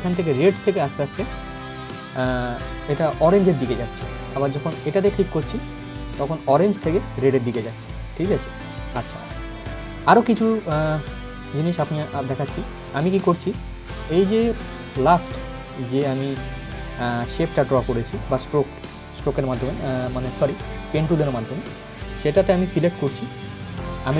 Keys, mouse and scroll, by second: 5.1 click, 9.5 scroll up 1, 11.7 scroll down 1, 12.7 click, 16.1 scroll up 1, 20.7 click, 23.2-24.1 drag.